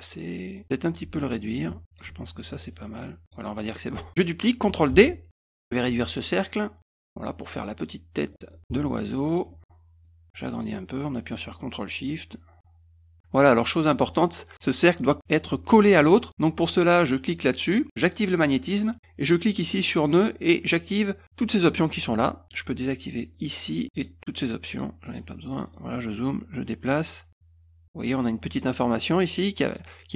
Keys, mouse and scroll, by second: 1.7 ctrl+shift+click, 2.7 click, 4.9 ctrl+d, 5.1 middle click, 6.0-6.8 ctrl+shift+drag, 7.2-8.2 drag, 8.3 middle click, 8.4 middle click, 8.8-9.4 ctrl+shift+drag, 9.7-10.1 drag, 10.6-13.1 ctrl+shift+drag, 13.8 click, 17.2 click, 18.0 click, 23.3 click, 24.0 click, 24.3 click, 24.7 click, 25.1 click, 25.5 middle click, 25.7 middle click, 26.7 click.